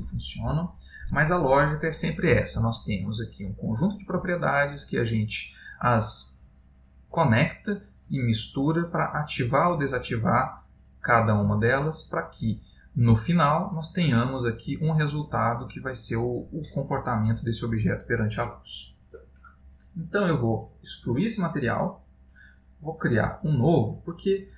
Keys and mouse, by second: 4.9 click, 11.0 click, 12.3 click, 21.1 click, 23.0 click, 24.4 middle click.